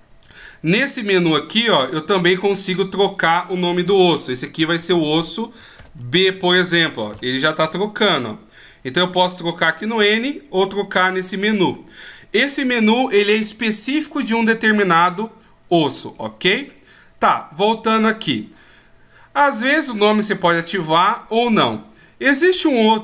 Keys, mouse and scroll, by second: 1.5 right click, 2.7 click, 4.9 s, 16.7 click, 19.8 click.